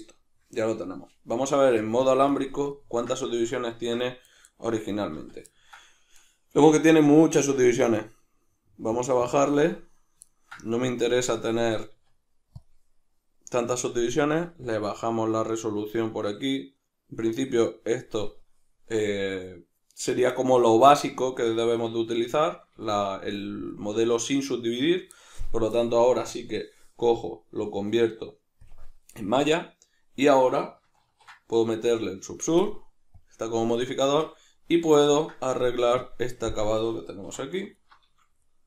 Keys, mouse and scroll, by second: 1.5 z, 5.1 z, 8.9-10.3 drag, 10.3-14.6 ctrl+middle drag, 11.9 q, 14.6-21.7 drag, 21.7-26.3 middle drag, 26.3-33.3 drag, 31.1 ctrl+2, 34.1 Tab, 34.4-36.0 middle drag, 36.0 click, 36.5-37.7 ctrl+middle drag, 37.3 3, 37.7 alt+right click, 38.5 middle click.